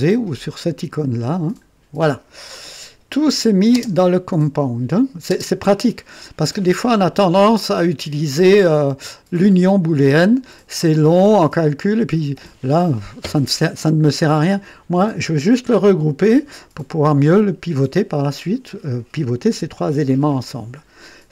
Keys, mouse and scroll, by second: 1.0 click, 1.5 click, 3.1 click, 3.7 space, 5.2 space.